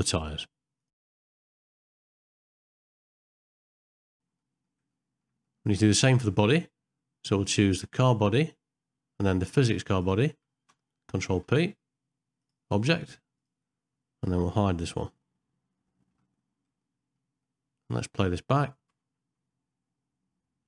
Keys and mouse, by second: 0.6 middle click, 0.7 ctrl+middle click, 1.2 ctrl+z, 1.3 ctrl+z, 1.8 ctrl+p, 2.1 middle click, 2.8 middle click, 2.9 shift+middle click, 3.0 shift+middle click, 3.2 click, 3.4 shift+click, 3.6 ctrl+p, 4.1 middle click, 4.1 h, 4.4 middle click, 5.0 middle click, 5.5 middle click, 6.1 middle click, 7.7 click, 11.4 ctrl+p, 16.2 h, 16.9 middle click, 17.5 middle click, 18.2 middle click, 19.2 space.